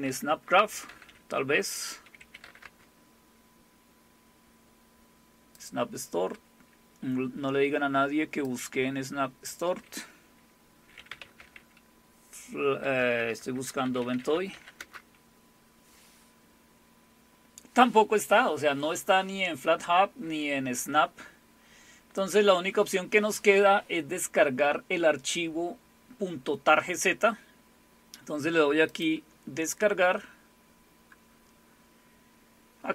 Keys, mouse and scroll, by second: 0.0-2.4 typing, 2.6 Return, 5.5 click, 8.4 click, 9.3 click, 10.7-11.9 typing, 12.9-15.0 typing, 17.0 typing, 22.2 click, 28.9 click, 32.0 scroll down 3.